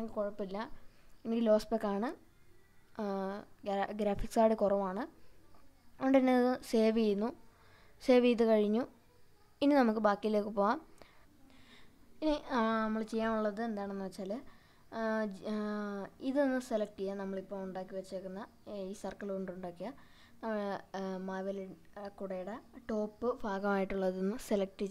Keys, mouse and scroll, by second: 9.7-10.9 middle drag, 11.2 click, 12.3 scroll down 1, 14.1-14.9 middle drag, 15.8-17.3 right drag, 17.3 w, 19.5-20.7 middle drag, 21.5-22.5 middle drag, 22.9-24.6 middle drag, 24.7-24.9 middle drag.